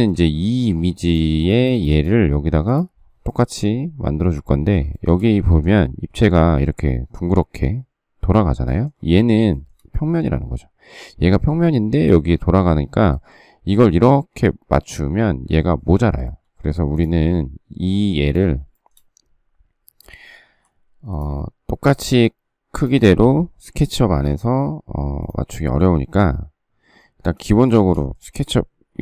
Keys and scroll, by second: 20.4 m, 22.0 space, 24.0 m, 28.9 m.